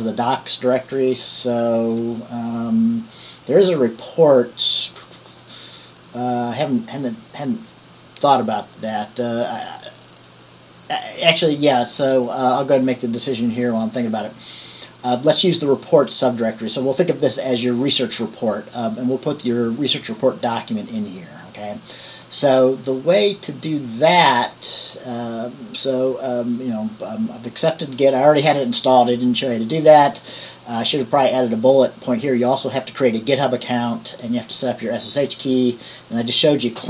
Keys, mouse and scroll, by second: 2.2 click, 3.4-4.6 drag, 5.6 click, 9.8 click, 11.4 click, 24.3 click, 25.5 click.